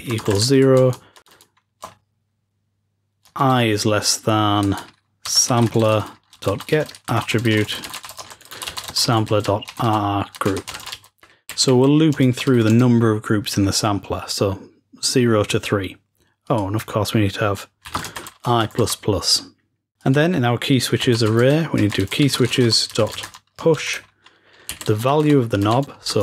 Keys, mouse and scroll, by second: 16.4-18.2 drag, 19.9-22.5 drag.